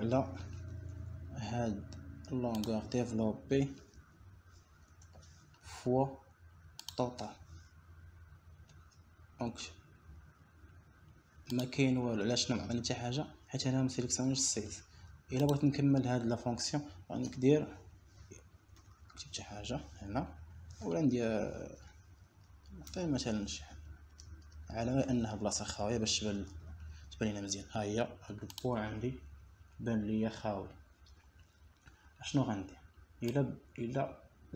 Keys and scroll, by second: 6.4 ;, 7.5 BackSpace, 7.9 \, 11.3 Return, 19.9 ., 21.4 3, 23.0 Left, 24.9 shift+6, 25.9 BackSpace, 26.7 6, 28.4 BackSpace, 29.0 Return.